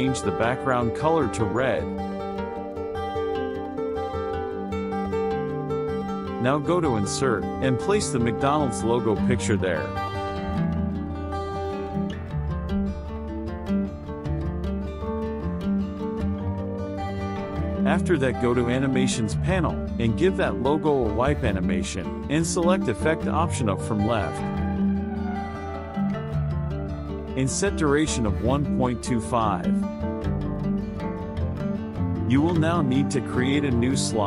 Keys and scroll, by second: 0.1 KP_Subtract, 5.3 KP_Subtract, 9.9 Return, 25.4 KP_Subtract, 30.9 KP_Subtract.